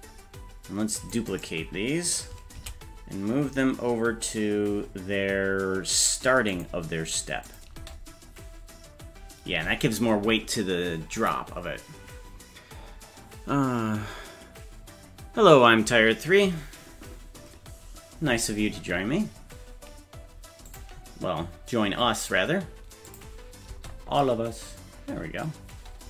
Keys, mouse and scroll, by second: 2.6 shift+d, 7.5 click, 7.7 space, 9.5 space, 20.7 click, 23.1 click, 23.7 space, 25.7 space.